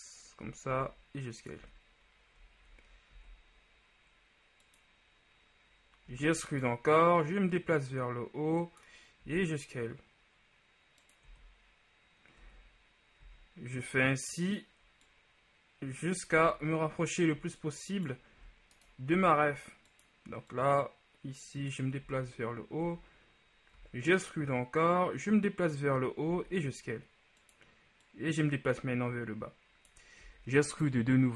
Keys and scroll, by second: 0.9 s, 1.7 z, 3.3 ctrl+s, 6.3 e, 9.5 s, 11.4 z, 13.3 e, 16.7 shift+z, 18.5 e, 19.2 s, 22.3 z, 23.9 e, 26.6 s, 30.6 e.